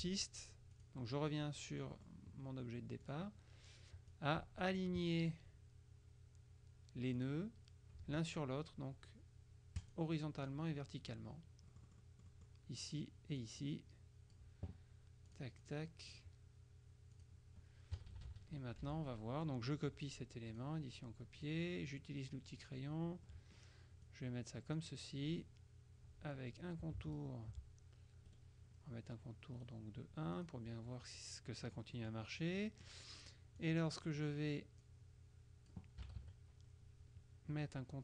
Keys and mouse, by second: 0.0 Delete, 0.9 click, 1.7 click, 3.1 click, 4.2 click, 7.3 click, 9.9 click, 11.8-12.9 middle drag, 12.9 click, 13.7 click, 15.3-16.7 drag, 17.2 click, 18.0 KP_Subtract, 18.9 F1, 19.1 click, 20.7 click, 21.5 click, 22.7 click, 23.4-25.4 drag, 27.2 shift+click, 28.4 right click, 29.7 right click, 30.5 click, 31.7 click, 33.7 click, 34.9 click, 36.1 KP_Subtract.